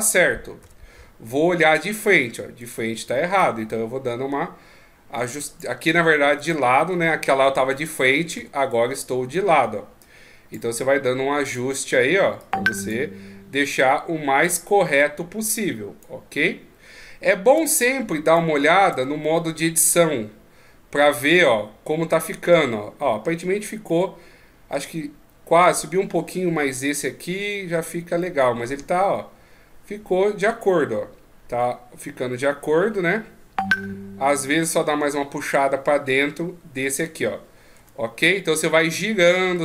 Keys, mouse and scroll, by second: 0.6 KP_3, 2.6 right click, 3.4 click, 6.4 right click, 7.4 KP_1, 8.3 KP_3, 10.0 click, 11.4 right click, 12.4 click, 13.6 right click, 14.4 click, 17.5 Tab, 18.2 right click, 18.9 Tab, 19.4 middle click, 23.9 middle click, 26.9 middle click, 28.2 middle click, 37.8 Tab, 38.2 middle click, 39.2 middle click.